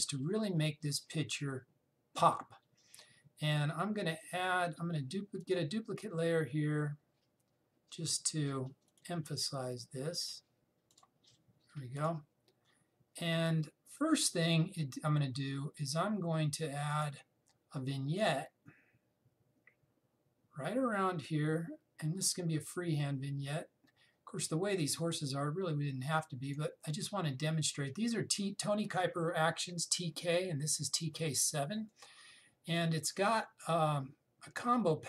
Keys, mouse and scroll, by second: 6.1 right click, 9.6 right click, 11.6 click, 17.6 click, 32.4 click.